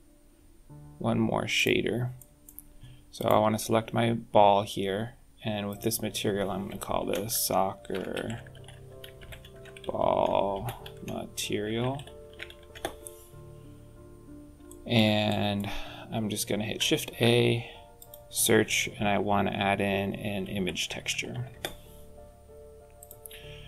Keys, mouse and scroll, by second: 2.1 middle click, 3.0 click, 5.6 click, 8.3 c, 9.8 l, 13.9-14.5 scroll up 8, 14.5 shift+middle click, 15.2 middle click, 16.9 shift+a.